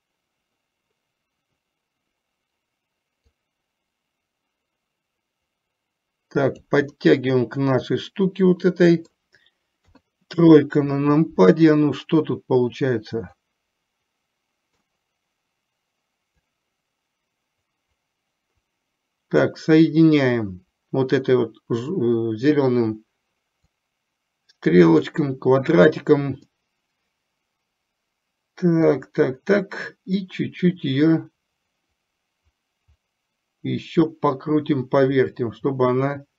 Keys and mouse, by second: 3.6-6.9 drag, 7.1-9.3 middle drag, 9.9 KP_3, 13.6-14.9 drag, 16.4 click, 17.6-19.6 drag, 23.9-25.2 drag, 26.7-29.1 middle drag, 30.7-36.3 drag.